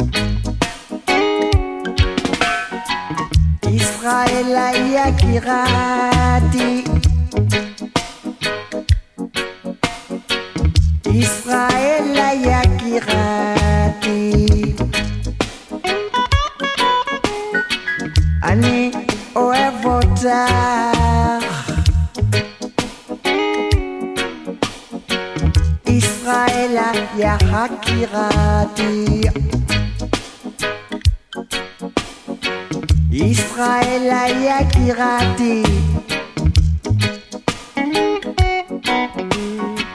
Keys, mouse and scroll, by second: 4.2 click, 14.9 click, 16.4 shift+click, 18.5 click, 23.3 shift+click, 26.5 shift+click, 27.3 alt+scroll up 1, 28.8-31.3 drag, 33.7 shift+click, 35.1 shift+click, 37.1 ctrl+click, 39.5 ctrl+click.